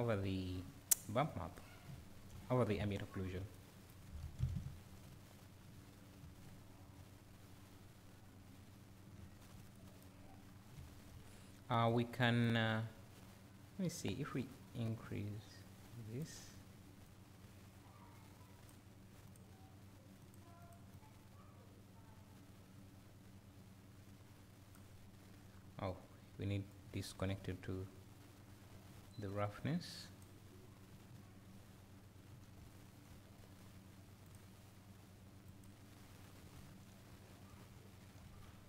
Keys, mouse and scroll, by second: 1.9 `, 4.5 `, 5.5-6.2 scroll up 1, 6.2 `, 8.4 scroll down 1, 9.1 `, 11.9 click, 20.2 click, 20.9-35.5 drag, 32.6 `, 36.6 `, 38.5-38.6 scroll down 2.